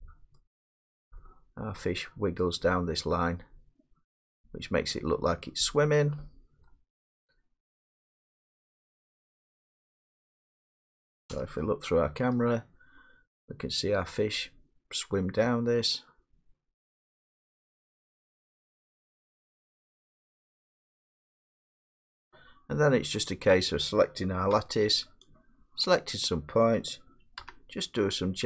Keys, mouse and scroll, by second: 0.4 middle click, 1.4 scroll down 4, 1.4 middle click, 1.8 scroll up 4, 2.5 middle click, 5.9-6.3 scroll up 3, 6.7 middle click, 8.0 middle click, 8.6 middle click, 9.0 middle click, 9.3 middle click, 9.3 middle click, 9.4 middle click, 10.4 middle click, 10.4 scroll down 4, 10.5 middle click, 10.5 scroll, 11.3 0, 14.5 middle click, 23.3 click, 24.5 Tab, 25.9 click, 27.4 g.